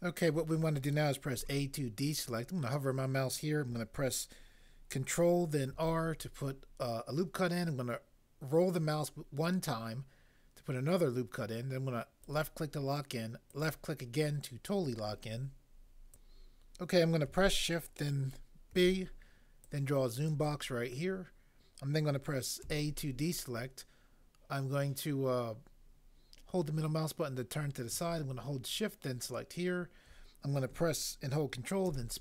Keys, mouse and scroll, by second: 1.3 a, 5.7 ctrl+r, 18.7 b, 22.6 a, 31.9 ctrl+space.